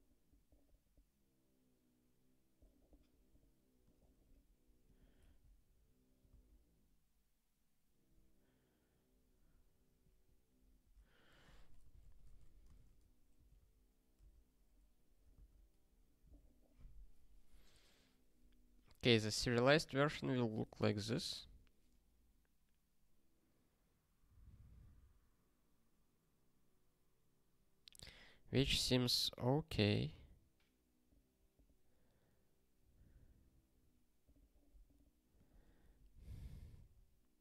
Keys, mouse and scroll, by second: 3.8 click, 4.8 click, 5.3 alt+d, 6.2 ctrl+b, 10.0 ctrl+/, 10.8 ctrl+p, 11.3-12.8 typing, 13.4 ctrl+g, 13.5 ctrl+a, 14.1 Return, 15.3 ctrl+alt+x, 35.3 click, 35.8 ctrl+p, 36.3 ctrl+n.